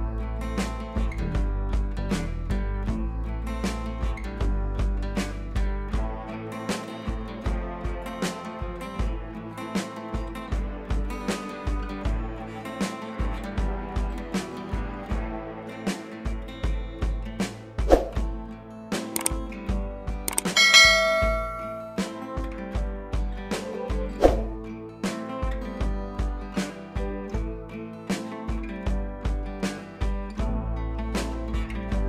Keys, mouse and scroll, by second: 0.9 click, 3.0 v, 3.8 click, 4.4 [, 4.9 click, 5.2 [, 5.4 click, 6.1 [, 6.3 [, 6.3 click, 8.4 [, 8.6 click, 14.7 ctrl+shift+a, 16.2-17.1 drag.